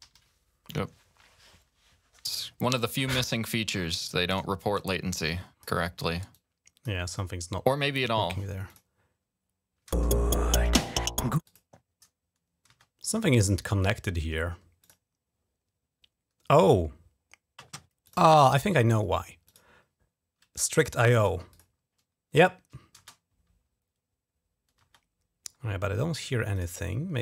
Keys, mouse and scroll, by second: 0.0 super+0, 4.5 click, 6.1 click, 8.4 click, 9.6 space, 11.2 click, 12.4 space, 13.6 right click, 14.6 click, 17.8 click, 19.2 click, 21.3 click, 22.8 space, 24.6 space, 26.3 click, 26.5 click.